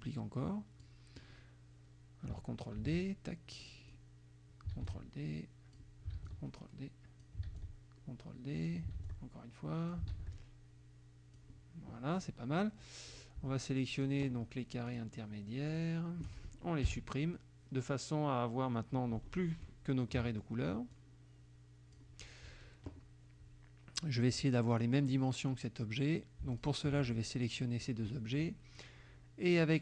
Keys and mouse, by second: 2.8 ctrl+d, 2.9-4.1 ctrl+drag, 4.8 ctrl+d, 4.9 ctrl+click, 6.3 ctrl+d, 6.3 ctrl+click, 7.5 ctrl+d, 7.6-8.9 ctrl+drag, 9.0 ctrl+d, 9.1 ctrl+click, 10.1 ctrl+d, 10.4-11.6 ctrl+drag, 12.2 click, 13.2 click, 14.0 shift+click, 14.9 shift+click, 15.7 shift+click, 16.9 Delete, 20.1 middle click, 20.9-22.2 drag, 24.8 click, 26.6 shift+click.